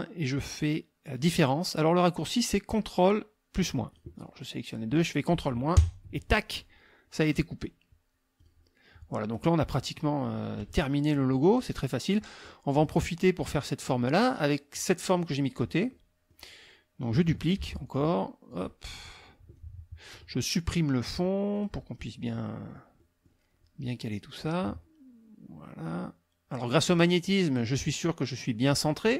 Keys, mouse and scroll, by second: 3.9 click, 4.3 click, 5.7 ctrl+KP_Subtract, 8.4 click, 9.2 click, 10.6 KP_Subtract, 11.4 click, 13.9 click, 15.1 click, 15.9 click, 17.6 ctrl+d, 17.9-19.3 ctrl+drag, 19.5 click, 21.5 click, 22.0 click, 22.6 click, 23.4 middle click, 24.5-26.7 drag.